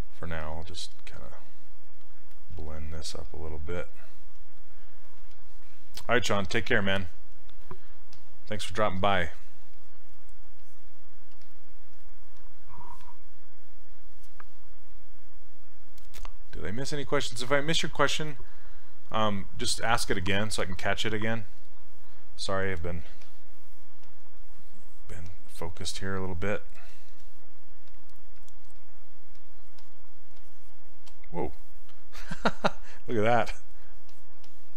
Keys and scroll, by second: 2.6 s, 11.4 s.